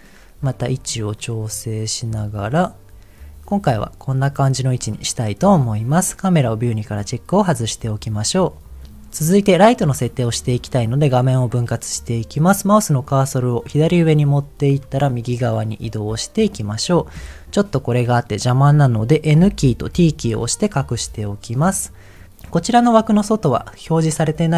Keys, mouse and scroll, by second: 0.8 click, 1.2 middle click, 3.9 shift+middle click, 6.4 click, 14.2-16.5 drag, 19.4 n, 19.9 t, 20.8-21.9 scroll up 2, 22.1 click.